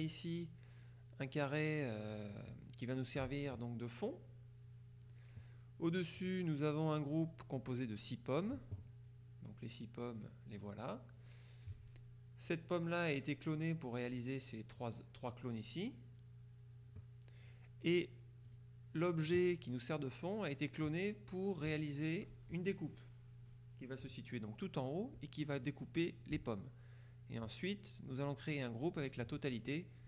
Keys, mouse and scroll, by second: 0.1 click, 6.3 click, 18.5 click, 21.8 click.